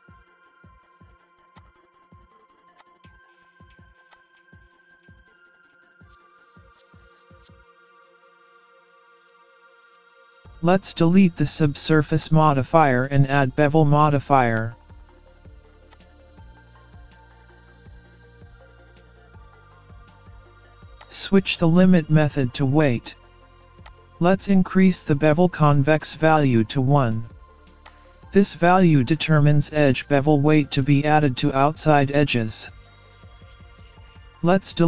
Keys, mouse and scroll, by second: 0.2-0.5 scroll down 2, 0.4-1.0 scroll up 2, 1.5 click, 2.8 click, 4.1 click, 5.5 scroll down 3, 5.6-6.4 scroll up 3, 8.2-9.0 scroll down 5, 12.2 click, 14.6 click, 17.4-18.6 scroll down 10, 18.6 scroll down 2, 18.7 scroll up 1, 19.0 middle click, 21.0 click, 24.9-25.4 scroll down 2, 25.4-25.8 scroll up 1, 25.8 middle click, 27.9 click, 29.6 scroll up 1, 29.9 middle click, 33.1-33.6 scroll down 4, 33.9 middle click.